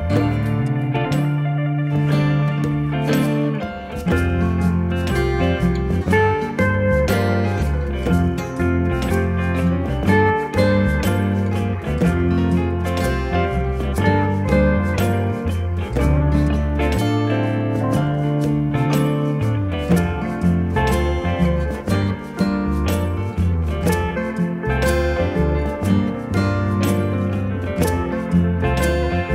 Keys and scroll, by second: 2.4 0, 2.5 ., 2.8 5.